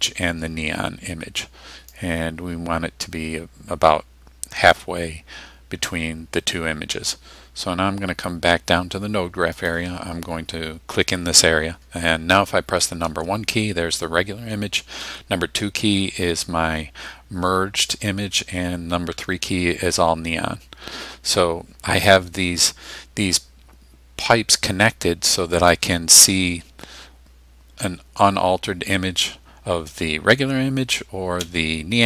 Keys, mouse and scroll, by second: 1.9-4.9 drag, 9.6 click, 13.0 1, 15.0 2, 19.1 3, 25.6 click, 26.2 1, 31.4 3.